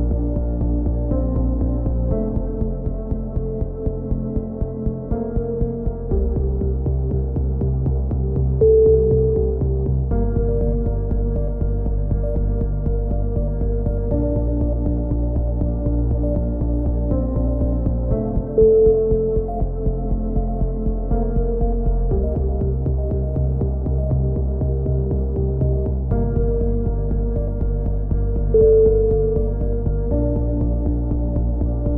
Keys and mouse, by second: 0.4 z, 1.4 Tab, 4.9 middle click, 5.4 Tab, 6.4 click, 7.1 z, 7.5 right click, 9.5 right click, 10.4-12.9 middle drag, 12.1 z, 12.9 z, 13.5 click, 15.0 a, 15.4-17.4 right drag, 17.5 click, 20.3 click, 21.9 a, 22.1-24.2 drag, 22.1 z, 22.8 z, 24.4 click, 24.6 click, 25.2 a, 25.3 z, 25.4 click, 25.6 Tab, 27.5 middle click, 28.3 Tab, 28.7 z, 30.4 middle click, 31.2 ctrl+r.